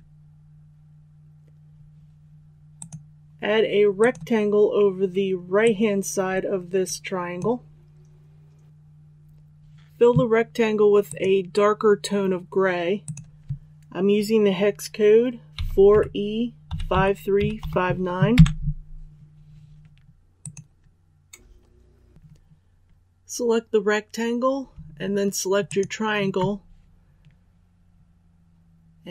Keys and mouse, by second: 15.5 KP_4, 16.6 KP_5, 16.9 KP_3, 17.3 KP_5, 20.3 click, 25.6 shift+click.